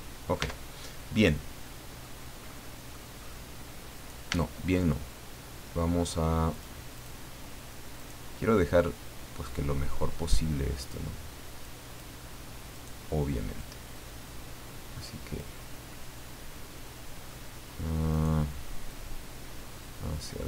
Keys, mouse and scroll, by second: 0.4 Tab, 0.9 scroll down 1, 1.2 middle click, 2.5 middle click, 3.9 right click, 4.3 Tab, 4.6-4.9 scroll up 1, 4.9-6.5 middle drag, 6.5 click, 6.9 click, 8.0 right click, 9.5-11.1 drag, 11.6 click, 12.7 right click, 13.6-15.6 drag, 15.9-17.5 middle drag, 18.1 right click, 18.9-20.4 drag.